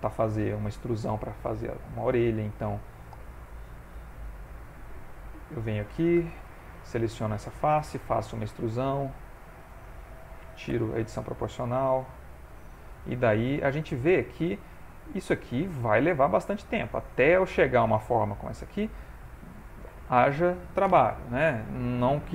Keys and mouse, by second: 0.3 middle click, 1.8 middle click, 2.7 middle click, 4.0 ctrl+r, 6.2 3, 6.4 click, 6.7 middle click, 7.8 e, 8.8 s, 10.7 o, 11.3 s, 12.4 middle click, 13.2 g, 14.0 middle click, 15.5 click, 16.3 ctrl+middle click, 16.8 shift+middle click, 17.2 middle click, 18.7 shift+middle click, 19.0 middle click.